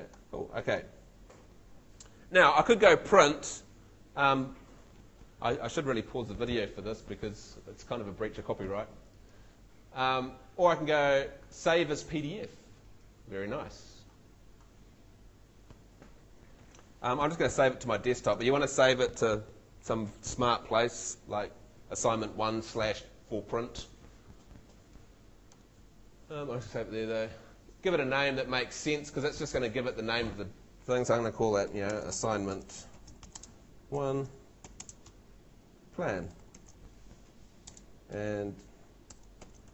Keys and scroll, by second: 31.6-37.7 typing, 38.9-39.7 typing.